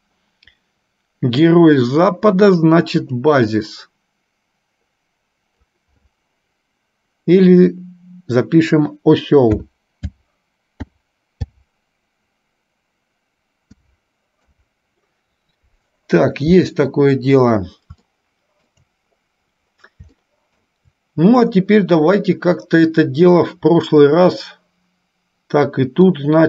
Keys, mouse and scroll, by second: 0.0 click, 18.1 shift+middle click, 20.3 shift+middle click, 26.1-26.4 drag.